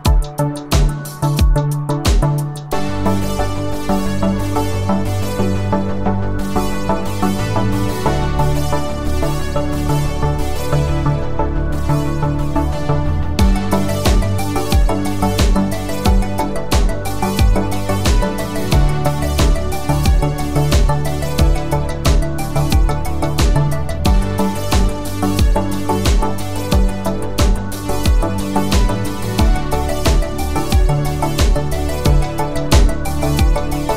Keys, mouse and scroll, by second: 2.7 click, 10.2 click, 13.3 click, 16.6 click, 19.8 right click, 22.2 click, 24.5 click, 26.0-26.9 typing, 27.4 click, 30.5-33.5 typing.